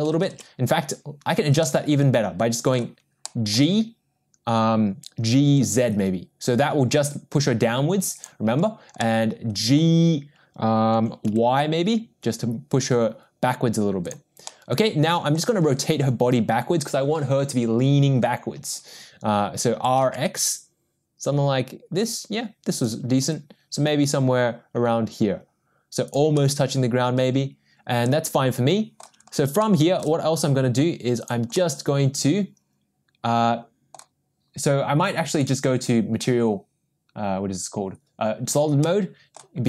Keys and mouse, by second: 1.2 ctrl+z, 1.6-2.7 middle drag, 3.2-8.3 middle drag, 4.0 g, 9.0 middle click, 10.9 g, 14.5-15.3 middle drag, 19.7 r, 23.3 g, 26.3-29.0 middle drag, 29.6-30.0 shift+middle drag, 31.5-33.3 middle drag, 33.4-33.9 middle drag, 35.4 click, 38.9-39.3 middle drag.